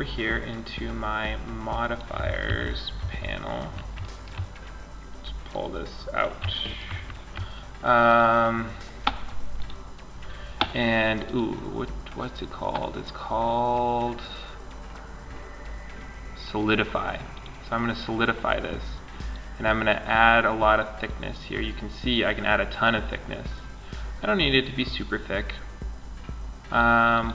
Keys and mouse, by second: 0.4 click, 1.1 click, 1.1 middle click, 1.1 click, 1.2 middle click, 1.7 click, 1.7 n, 2.2 t, 4.7-12.3 drag, 18.6-20.5 drag, 26.3-27.3 drag.